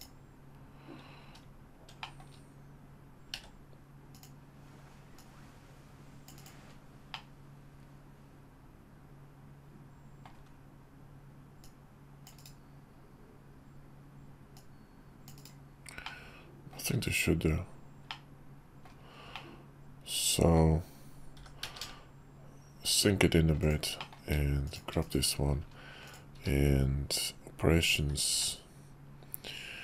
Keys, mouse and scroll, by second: 1.7 shift+middle click, 3.1 d, 4.9-6.4 drag, 6.9-10.0 middle drag, 11.3-12.5 drag, 11.3 `, 14.2-15.5 drag, 15.8-16.5 middle drag, 17.8-18.6 middle drag, 19.0-20.2 middle drag, 21.1 g, 23.8 click, 24.4 shift+click, 24.7 /, 25.8 click, 26.1 q, 28.0 q.